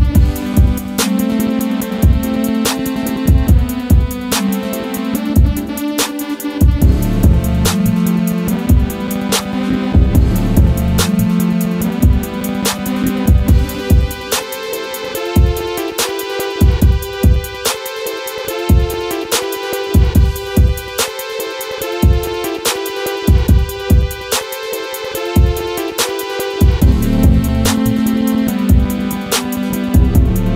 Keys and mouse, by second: 1.9 click, 4.9-6.7 drag, 6.8 click, 9.2-12.3 middle drag, 12.6 KP_1, 13.5 click, 15.0-16.2 drag, 16.4 click, 16.7-17.3 middle drag, 17.9-18.4 middle drag, 18.7 middle drag, 20.0-20.6 middle drag, 21.4 KP_1, 23.1 shift+a, 25.8-29.3 typing, 27.7 click, 30.3 s.